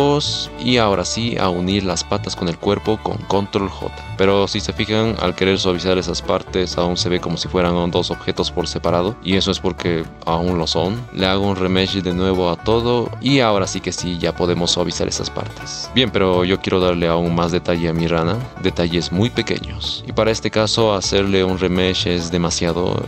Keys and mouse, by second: 0.5-1.4 drag, 1.9 middle drag, 2.5 shift+click, 3.4 ctrl+j, 4.3 middle click, 5.0-6.4 drag, 7.0 ctrl+z, 7.5 middle click, 8.3 shift+middle click, 8.6-10.0 drag, 10.1 shift+click, 13.2-14.2 middle drag, 16.4 middle click, 18.1 c, 20.0 r.